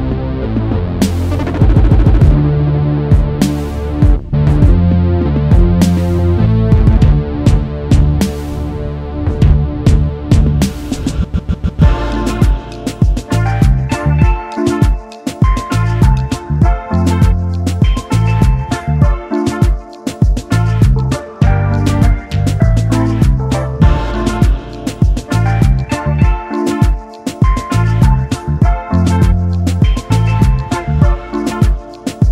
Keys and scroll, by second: 0.2 ctrl+s, 0.6 ctrl+s, 17.0 f, 25.0 ctrl+z, 29.7 Return, 29.7 0.